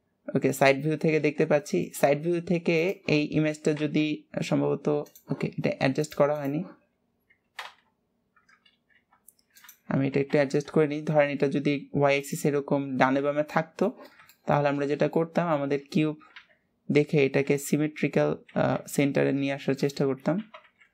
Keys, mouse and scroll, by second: 1.7-6.8 middle drag, 2.9-6.8 drag, 7.0-7.5 scroll down 2, 7.5 g, 9.8 g, 11.9-13.7 middle drag, 15.0 middle click, 15.5 middle click, 16.5-20.9 middle drag.